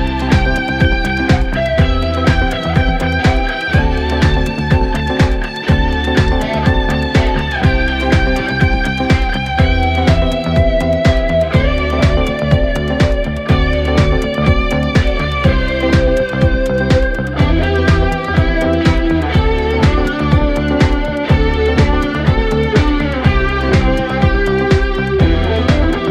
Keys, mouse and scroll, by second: 0.0-0.1 typing, 0.9 ctrl+z, 1.0 ctrl+z, 1.6-8.9 typing, 10.0-10.3 scroll down 5, 10.3 a, 10.6-12.1 middle drag, 12.1 click, 12.3 scroll down 3, 12.5 middle click, 13.4 KP_1, 14.2 g, 15.6 click, 16.1-17.3 scroll up 7, 17.3-18.0 drag, 18.6 click, 19.7 g, 21.1-21.6 scroll down 4, 21.2 a, 21.6 middle click, 22.4 click, 22.6-24.2 middle drag, 24.5 shift+d, 25.3 ctrl+z, 26.0 click.